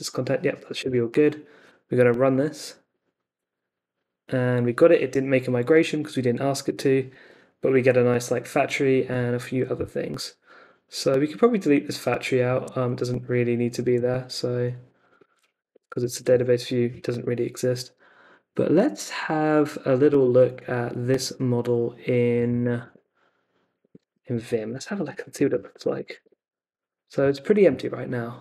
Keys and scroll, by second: 0.8 Return, 15.2 super+c, 15.3-16.2 typing, 16.2 Return, 22.5 super+c, 22.9 super+Tab, 24.7 super+t, 25.1-26.2 typing, 26.2 Return.